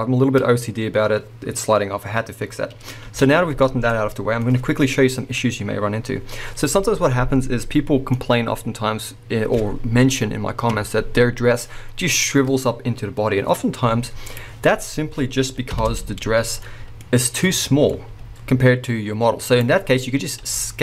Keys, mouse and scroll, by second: 3.3 space, 6.2-7.6 scroll up 2, 14.3 click, 15.8 shift+Left, 16.5 scroll down 1, 16.7-19.6 middle drag, 17.0-17.6 scroll up 1, 18.1 s, 19.6 right click, 20.4 s.